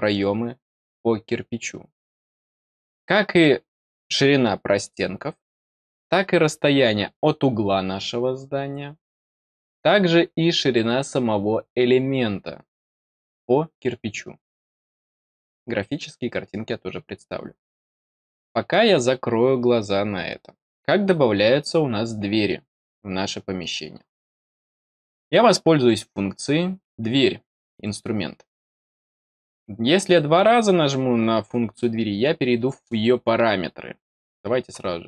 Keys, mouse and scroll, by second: 27.7 click.